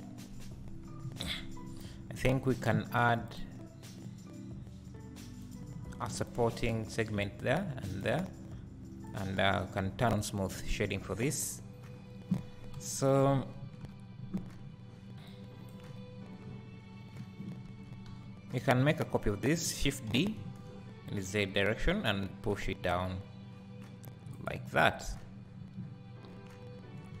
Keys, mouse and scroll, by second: 0.9 KP_3, 3.0 r, 9.0 click, 9.4-15.3 right drag, 11.0-11.3 scroll down 1, 11.3 `, 11.9-12.8 scroll down 2, 12.8 KP_1, 13.8 KP_3, 15.3-24.5 drag, 16.4-17.7 scroll down 2, 17.7 Tab, 18.1 a, 20.2 shift+d, 25.1 Tab, 26.2-26.8 scroll down 2, 26.8-27.2 scroll up 2.